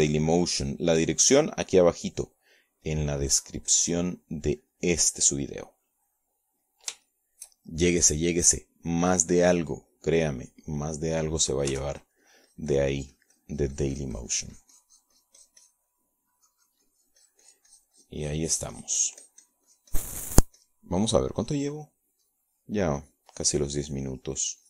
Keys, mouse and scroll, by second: 2.8 shift+middle click, 3.9 middle click, 4.9-9.0 drag, 9.1 shift+middle click, 10.1 middle click, 12.2 middle click, 13.8 f, 14.1-22.9 drag, 23.7 click, 24.3 click.